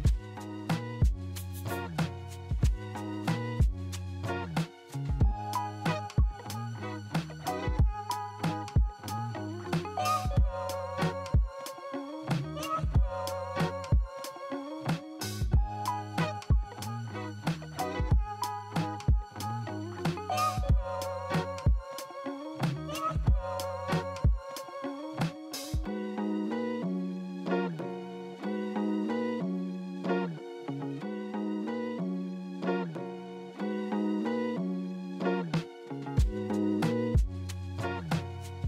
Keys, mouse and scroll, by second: 2.4 right click, 4.3 Delete, 5.3 w, 6.7 alt+right click, 7.1 alt+right click, 11.5-11.8 scroll up 1, 12.1 alt+middle click, 19.1 alt+a, 24.3 double click, 25.4 double click, 28.0 double click, 29.1 double click, 32.8 e, 33.8 right click, 36.1 alt+a.